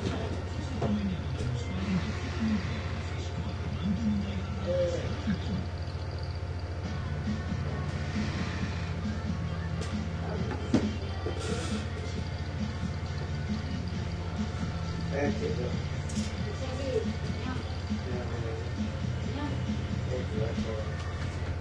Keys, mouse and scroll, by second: 13.1 click, 14.5 ctrl+d, 15.5 shift+Down, 19.0 F8, 20.7 shift+Home, 21.1-21.6 typing.